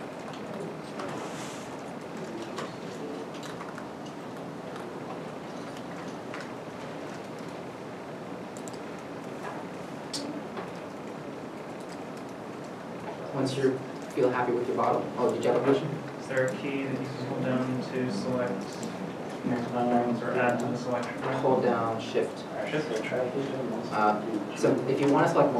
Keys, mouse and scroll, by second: 1.2 shift+middle click, 2.6 scroll up 1, 3.2 middle click, 3.4 Tab, 4.5 middle click, 7.1 middle click, 11.2 middle click, 11.5 shift+middle click, 11.8-12.3 scroll up 1, 18.0 scroll, 18.0 Tab, 18.9 middle click, 22.4 shift+click, 23.6 alt+a.